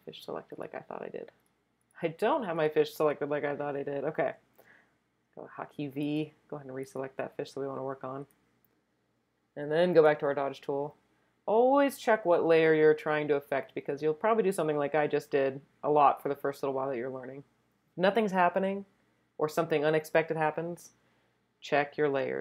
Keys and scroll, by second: 4.5 v.